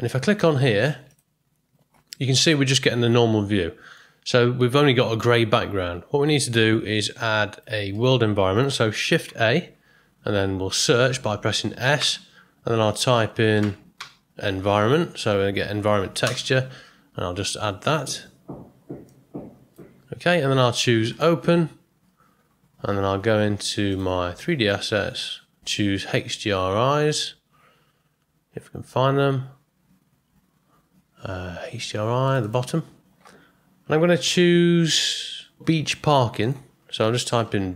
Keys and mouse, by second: 2.2-4.0 middle drag, 6.9 click, 8.0 middle click, 9.2 shift+a, 19.2 click.